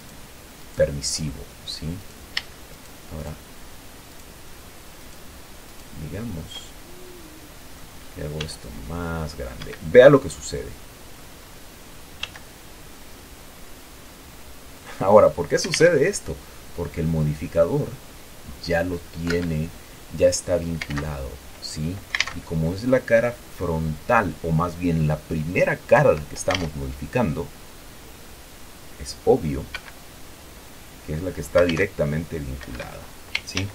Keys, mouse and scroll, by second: 0.1 shift+middle click, 0.3 shift+right click, 1.0 shift+right click, 2.3 right click, 3.0 shift+right click, 3.5 shift+right click, 4.5 shift+right click, 5.3 shift+right click, 6.0 shift+right click, 6.9-8.7 shift+middle drag, 8.7 s, 9.9 Escape, 10.2-10.7 scroll down 2, 10.7-11.8 middle drag, 11.8-13.2 scroll up 2, 12.5 s, 15.1 click, 16.1 alt+a, 19.7 Escape, 21.2 alt+q, 22.5 alt+a, 26.3 Escape, 27.2 alt+a, 30.0 Escape, 32.0 alt+a, 33.0 Escape.